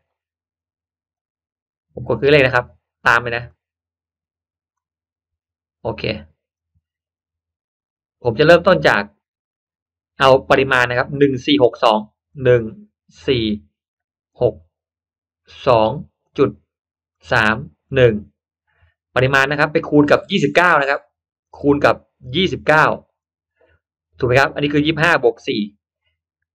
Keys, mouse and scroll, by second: 2.5 click, 3.4-4.5 drag, 6.5-7.1 drag, 8.8-9.7 drag, 12.2 drag, 13.1 click, 14.3 click, 15.5 click, 16.1 click, 17.0 drag, 17.7 click, 21.3 click, 22.1 drag, 23.1 click.